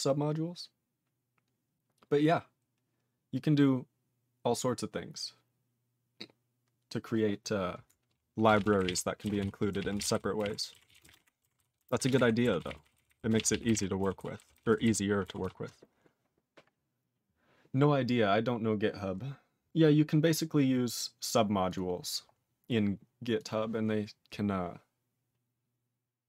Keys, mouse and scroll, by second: 8.5 ctrl+space, 8.5 ctrl+a, 8.6 ctrl+p, 8.8 ctrl+n, 8.9 ctrl+e, 9.4 ctrl+s, 9.7 ctrl+a, 9.8 ctrl+p, 9.9 ctrl+space, 10.0 ctrl+e, 10.0 ctrl+n, 10.2 ctrl+n, 10.4 ctrl+g, 10.4 ctrl+e, 10.9 ctrl+s, 11.0 ctrl+n, 11.0 ctrl+space, 11.1 ctrl+e, 11.1 ctrl+g, 11.6 ctrl+s, 11.8 ctrl+a, 12.0 ctrl+space, 12.1 ctrl+e, 12.2 ctrl+g, 12.6 ctrl+s, 12.7 ctrl+n, 12.8 ctrl+n, 13.0 ctrl+n, 13.1 ctrl+n, 13.3 ctrl+space, 13.4 ctrl+a, 13.4 ctrl+p, 13.5 ctrl+p, 13.7 ctrl+g, 13.7 ctrl+e, 14.2 ctrl+s, 14.4 ctrl+n, 14.5 ctrl+n, 14.7 ctrl+n, 14.9 ctrl+n, 15.4 ctrl+s, 21.7 click, 21.7 click, 22.3 scroll down 3, 23.4 click, 23.4 click.